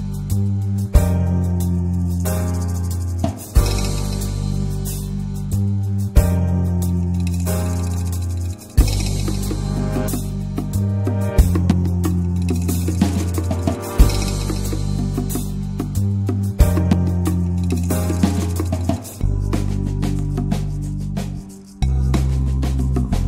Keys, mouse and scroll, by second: 0.6-3.7 middle drag, 3.7-4.1 scroll down 3, 4.1-4.5 shift+middle drag, 6.3 shift+a, 6.9 click, 7.2-8.2 middle drag, 8.2 t, 9.0-11.2 drag, 12.3-12.8 shift+middle drag, 12.8 ctrl+1, 13.1 ctrl+2, 13.4 ctrl+3, 13.6-14.2 right drag, 14.2 shift+middle click, 14.3-14.8 shift+scroll up 1, 14.8 click, 15.8 click, 16.3 click, 16.6 shift+click, 17.4 ctrl+l, 17.5 drag, 17.9 middle click, 18.1-18.4 scroll up 1, 18.4-18.8 shift+middle drag, 18.8 click, 19.4-22.3 middle drag, 22.3 click.